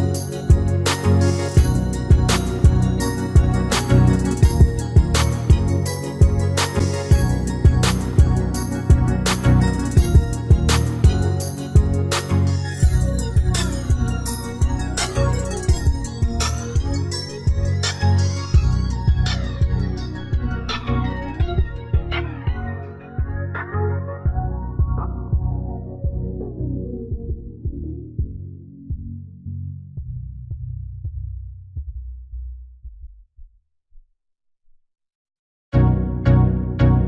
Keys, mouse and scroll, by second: 1.1-2.8 drag, 4.0-5.8 middle drag, 5.0-6.7 drag, 6.5 s, 9.7-15.8 middle drag, 16.1 s, 19.2-22.0 middle drag, 22.4-24.2 drag, 23.2 middle click, 26.7-28.6 right drag, 29.0 middle click, 29.0 d, 29.3 x, 32.0 s, 33.8-35.7 middle drag.